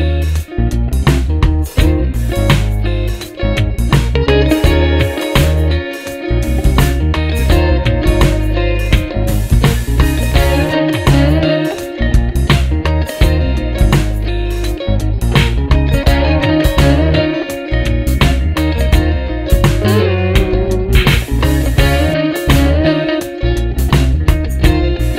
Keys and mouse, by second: 0.8 ctrl+z, 2.7 Up, 3.5 Up, 3.7 Up, 4.0 Up, 4.6 Up, 4.9 Up, 5.1 Up, 5.9 Down, 10.7 shift+Up, 11.2 shift+Up, 12.1 shift+Up, 12.4 shift+Up, 12.7 shift+Up, 13.1 shift+Up, 13.4 shift+Up, 15.2 shift+Down, 16.9 shift+Up, 19.6 shift+Up, 23.3 ctrl+d.